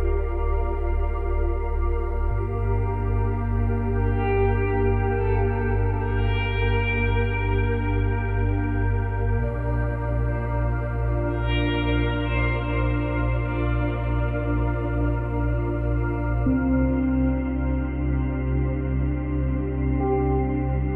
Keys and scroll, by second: 11.8 Delete.